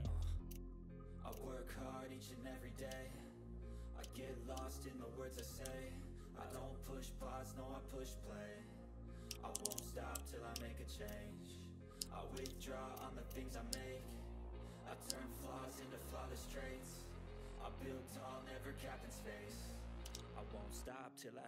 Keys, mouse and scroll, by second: 0.5 shift+click, 0.9 typing, 1.5 shift+click, 2.9 ctrl+scroll down 1, 3.6 click, 4.0 ctrl+scroll down 1, 4.2 middle click, 4.6 ctrl+scroll down 1, 5.0 click, 5.5 ctrl+d, 5.7-7.9 drag, 9.2-10.5 typing, 10.7 click, 11.2 shift+click, 12.3 ctrl+z, 12.6 click, 14.2 click, 15.6 click, 15.6 typing, 15.6 click, 19.1 click, 20.0 ctrl+z, 20.3-21.4 drag.